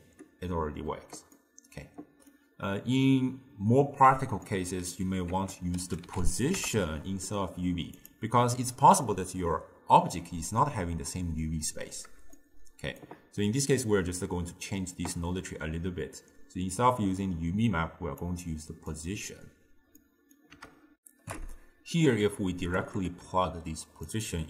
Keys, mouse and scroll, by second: 1.5-6.6 middle drag, 6.6 ctrl+a, 12.4-18.3 shift+middle drag, 18.3-19.0 drag, 21.0 ctrl+alt+shift+w, 24.1 drag.